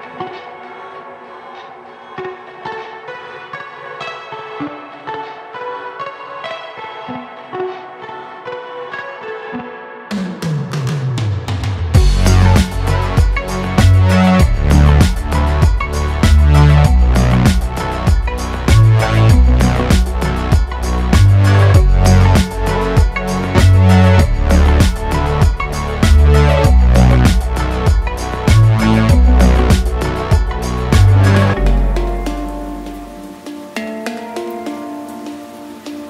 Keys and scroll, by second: 1.3 s, 2.9 e, 7.9 e, 8.9 s, 11.1 e, 12.7 s, 17.0 e, 19.5 s, 21.5 e, 29.5 e, 31.0 s, 33.0 e, 34.7 s.